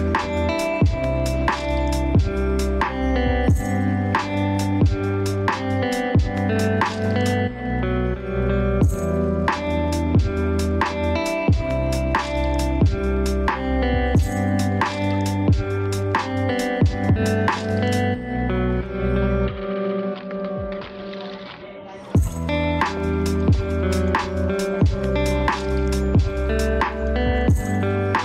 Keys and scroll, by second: 4.5 ctrl+space, 12.4 ctrl+z.